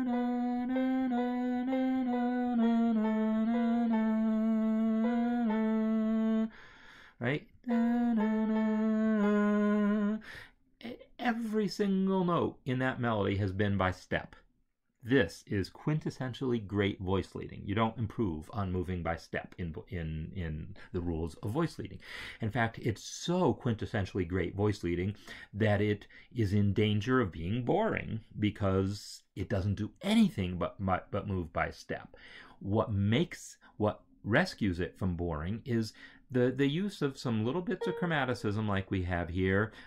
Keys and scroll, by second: 5.3 Right, 7.5 Right.